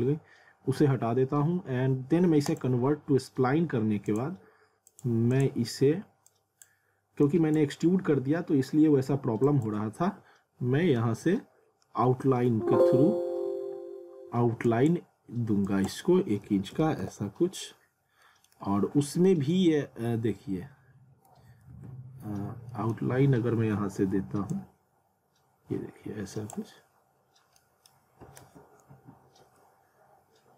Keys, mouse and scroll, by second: 2.5 click, 9.5 click, 14.7 click, 17.0 Return, 18.2 middle click, 18.7 scroll down 1, 19.2 middle click, 19.8-20.4 scroll down 1, 20.6 scroll up 1, 21.7 z, 22.4-22.7 scroll down 1, 22.7 middle click, 23.1-24.4 scroll up 1, 24.5 click, 26.8 scroll down 1, 27.6 middle click, 28.5 ctrl+z.